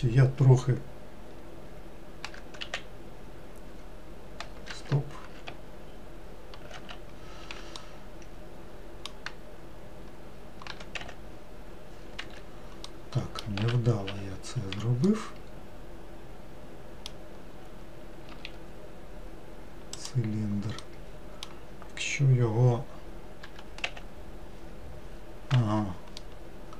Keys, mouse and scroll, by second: 2.3 g, 6.8 ctrl+z, 7.9-10.8 middle drag, 10.8 g, 12.9 middle click, 13.7 ctrl+z, 14.2 ctrl+z, 15.2-18.3 middle drag, 18.4 shift+a, 20.9-23.5 middle drag, 23.5 g, 26.3-26.7 middle drag.